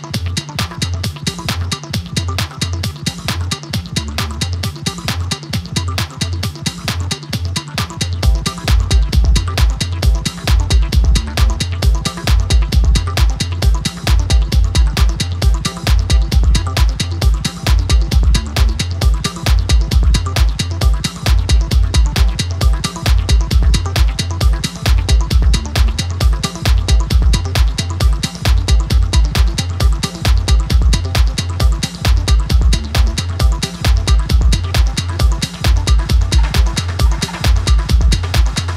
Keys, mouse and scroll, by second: 0.6 click, 1.6-2.5 scroll up 2, 2.5 x, 3.5 alt+shift+click, 4.1 click, 5.5 click, 6.1 scroll down 3, 6.3 middle click, 6.8 ctrl+z, 7.5 ctrl+z, 8.4-10.3 drag, 10.6 click, 11.1 scroll up 4, 11.4 middle click, 12.0-12.5 scroll down 2, 12.5 click, 15.3-15.6 scroll down 1, 15.6 scroll up 1, 15.8 middle click, 16.6-17.2 scroll down 1, 17.2 click, 17.7 scroll up 2, 17.8-19.2 middle drag, 19.2 scroll down 1, 19.5 scroll up 1, 19.6 scroll down 1, 19.7 middle click, 20.6 click, 21.8 click, 22.1 click, 23.6 click, 24.3-25.0 scroll up 1, 25.0 ctrl+r, 26.6 ctrl+b, 27.6-28.9 scroll up 1, 28.9-30.4 middle drag, 32.0-32.8 scroll up 1, 32.8 alt+e, 36.9 click, 37.3 click, 38.2 scroll down 1, 38.4 click.